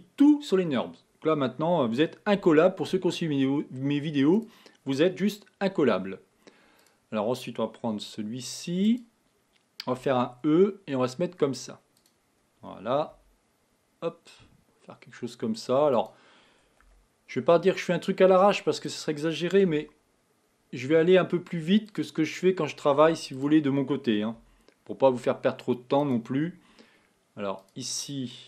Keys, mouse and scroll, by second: 2.4 g, 6.8 click, 8.8 click, 10.0 e, 13.1 r, 17.0 g, 19.8 s, 23.4 click, 24.4 s, 27.6 click.